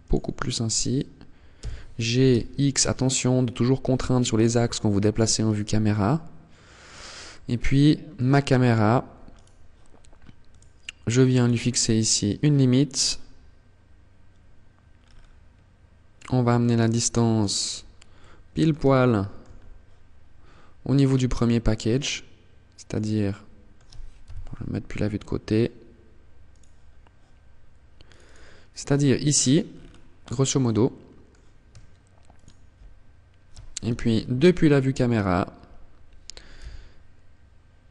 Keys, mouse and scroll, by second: 0.7 g, 6.0 click, 6.4 middle click, 8.4 right click, 9.6 click, 10.5 click, 11.2 middle click, 14.1 scroll down 5, 15.3 click, 16.8-17.3 scroll up 4, 17.3 middle click, 18.0 shift+middle click, 18.7-19.1 scroll up 2, 20.0 click, 22.4 middle click, 23.4 KP_3, 24.0 scroll down 1, 25.6 click, 26.1 scroll up 1, 27.2 click, 27.4 click, 28.4-29.2 scroll down 10, 29.3 scroll up 3, 29.8 middle click, 31.4 shift+click, 33.0 KP_0, 35.8 g.